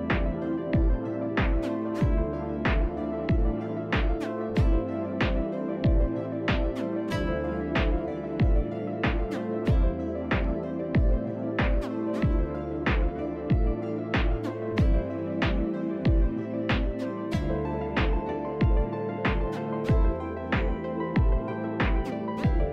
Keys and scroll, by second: 4.5 Delete, 5.7 t, 18.4 r, 19.3 f, 21.7 2, 21.7 Return, 21.7 2.